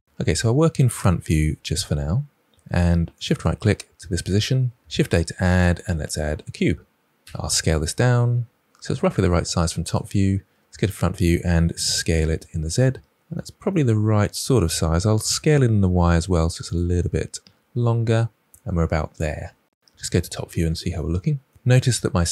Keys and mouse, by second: 0.0 KP_7, 4.8 shift+a, 7.1 s, 10.6 KP_1, 11.8 s, 12.0 z, 14.5 shift+middle click, 14.6-15.1 shift+middle drag, 15.8 s, 16.1 y, 16.8 drag, 18.4 middle click, 19.0-19.7 middle drag, 19.8 KP_7.